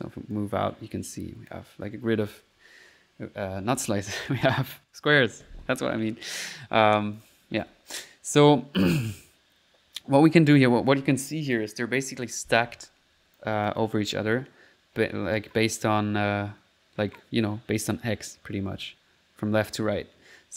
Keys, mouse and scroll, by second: 0.4-1.7 drag, 6.3 click, 7.7 ctrl+s, 8.0 ctrl+middle click, 8.4 ctrl+click, 9.1 ctrl+click, 9.7 middle click, 10.6 click, 13.4 click.